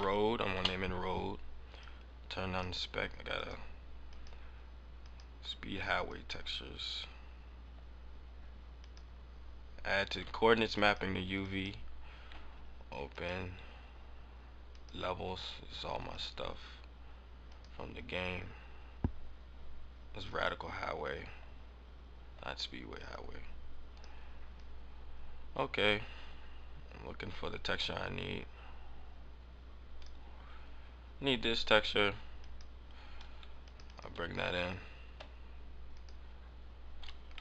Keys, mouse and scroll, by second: 1.8 click, 3.3 click, 3.8 scroll up 1, 4.0 click, 4.9 click, 6.3 click, 7.4-8.7 scroll down 4, 8.7 click, 11.3 click, 34.1 click, 35.8 click.